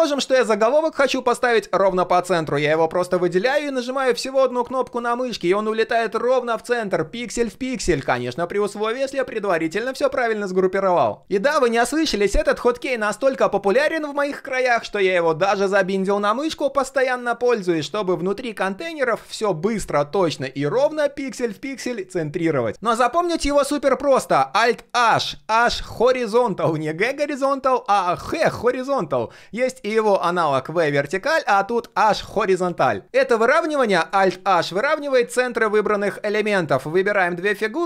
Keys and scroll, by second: 4.0 alt+h, 12.4 alt+h, 12.6 alt+h, 13.0 alt+h, 15.9 alt+h, 16.2 alt+h, 16.4 alt+h, 20.4 alt+h, 20.6 alt+h.